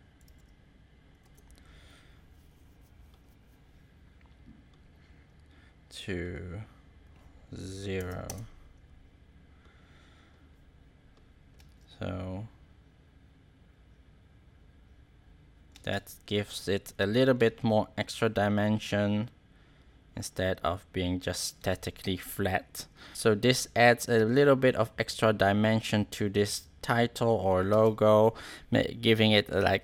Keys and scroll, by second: 0.2 3, 7.9 0, 8.2 Return, 11.5 space, 15.7 space, 17.3 space, 21.5 space, 23.0 space, 27.6 space.